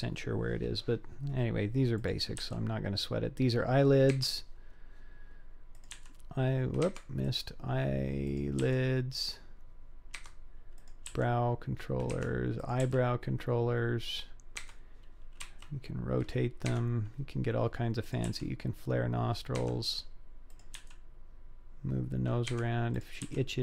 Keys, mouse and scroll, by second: 2.0 click, 2.4 g, 5.8 click, 6.0 g, 7.3 click, 8.3 click, 8.6 g, 10.8 click, 11.1 g, 12.6 click, 12.9 g, 15.4 r, 18.0 click, 18.3 g, 20.5 click, 20.8 g, 22.9 click, 23.2 g.